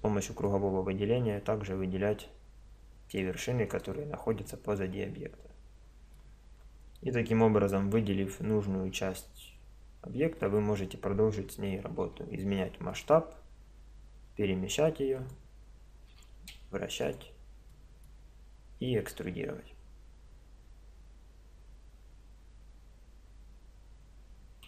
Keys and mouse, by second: 3.9 click, 4.5-6.1 middle drag, 6.5-10.5 middle drag, 7.9 z, 12.1 s, 14.2 g, 16.1 r.